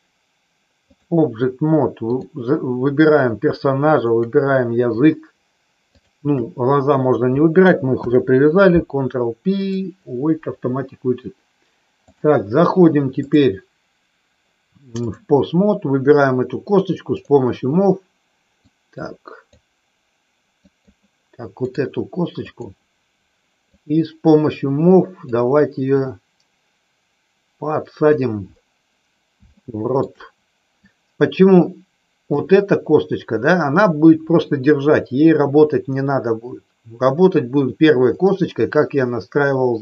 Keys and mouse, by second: 2.0 click, 3.9 shift+click, 5.9 shift+click, 7.9 ctrl+p, 12.0 click, 13.3-15.3 drag, 17.0 click, 18.5 click, 20.6 click, 22.5 click, 23.8-25.3 drag, 25.9-28.1 drag, 29.5 shift+middle click, 30.8-32.3 drag, 38.1-39.8 middle drag.